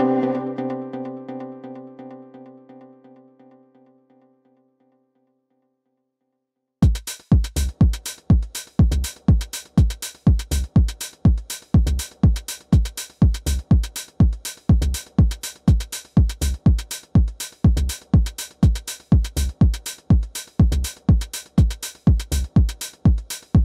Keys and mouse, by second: 0.2 click, 1.3 middle click, 2.4 click, 3.2 click, 3.6 3, 5.8 2, 6.5 click, 7.5 1, 9.0-10.7 right drag, 11.3 w, 12.1 click, 13.2 click, 14.4 alt+click, 15.0 4, 15.6 click, 17.5 alt+middle drag, 17.9 alt+click, 20.8 alt+x, 21.3-22.3 alt+drag, 22.8 alt+click, 23.3 click.